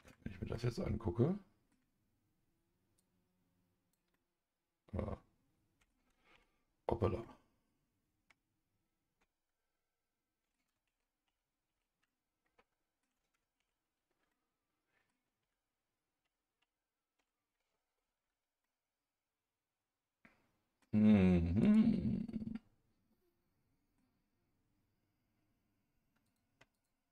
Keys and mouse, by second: 0.5 Tab, 0.5-1.7 middle drag, 2.9 click, 4.1-5.9 middle drag, 6.3 ctrl+z, 7.2-10.5 middle drag, 10.9 ctrl+z, 11.2 ctrl+z, 11.7 ctrl+z, 12.0 middle click, 13.6 ctrl+z, 14.3 middle click, 15.4 ctrl+z, 16.2 ctrl+z, 16.6 ctrl+z, 18.6-20.8 middle drag, 21.6 click, 22.0-24.0 middle drag, 26.7 shift+click.